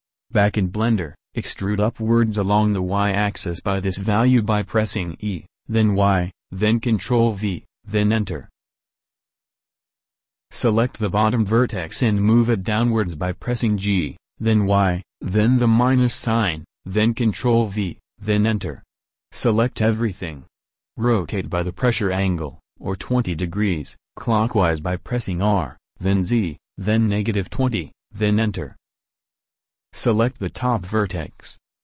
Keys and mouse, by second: 2.1 e, 13.3 g, 16.1 a, 16.4 a, 20.7 r, 30.4-31.8 drag, 31.7 alt+Tab.